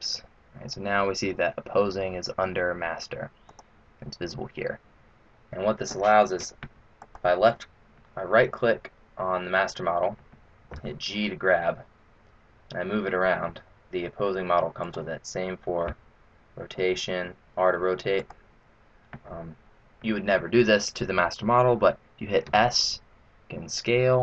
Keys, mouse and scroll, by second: 3.6 click, 7.5 right click, 10.7 g, 15.9 r, 22.4 s.